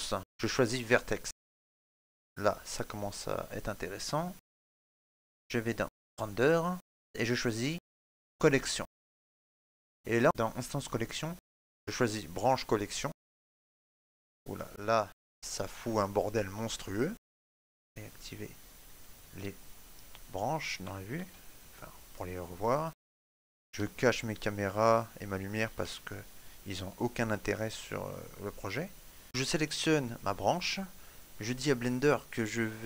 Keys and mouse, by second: 0.2 click, 2.9 middle click, 6.7 click, 11.5 middle click, 17.5 ctrl+middle click, 18.4 click, 21.9 shift+middle click, 22.5 ctrl+middle click, 23.0 shift+middle click, 24.0 right click, 25.4 h, 25.7 middle click, 27.0 right click, 27.4 h, 28.5 shift+middle click, 29.0 middle click, 29.2 click, 29.8 right click, 32.0 click.